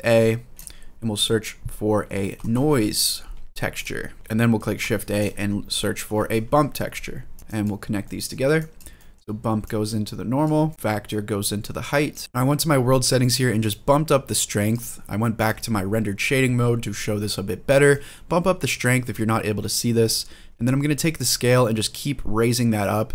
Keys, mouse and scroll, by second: 4.2 middle click, 4.6 shift+a, 7.4 click, 7.8 middle click, 8.4 click, 8.7 middle click, 9.4-10.2 drag, 10.5 middle click, 10.7 scroll down 2, 10.8-11.9 drag, 12.2 ctrl+z, 13.1-14.5 drag, 17.7 click, 20.9-22.9 drag.